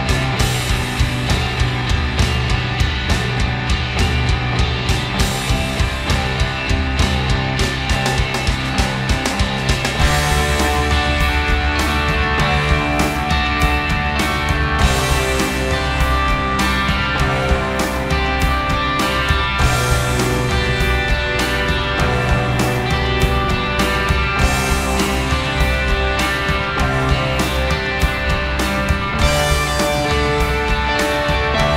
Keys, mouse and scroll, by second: 0.4 s, 1.1 r, 2.7 click, 3.9 g, 5.5 middle click, 5.6 click, 5.7 Tab, 6.7 middle click, 7.3-8.8 drag, 8.8 Tab, 9.1 a, 9.2 a, 9.6 Tab, 9.9 a, 9.9 g, 11.0 r, 12.4 Tab, 16.2 click, 16.7-19.4 middle drag, 20.0 ctrl+z, 20.2 ctrl+z, 22.2-24.4 middle drag, 24.8 middle click, 25.4 Tab, 25.8 a, 25.9 a, 25.9 r.